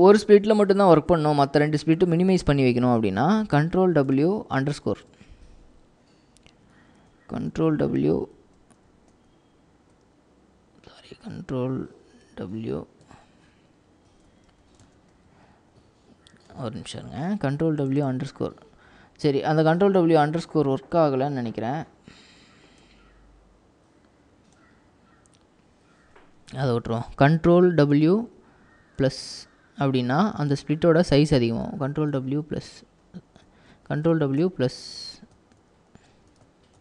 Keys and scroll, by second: 3.9 ctrl+w, 4.7 shift+-, 9.2 ctrl+-, 12.4 ctrl+w, 13.1 ctrl+=, 14.5 ctrl+w, 28.1 ctrl+w, 29.0 =, 31.8 ctrl+w, 32.2 =, 33.8 ctrl+w, 36.2 ctrl+w.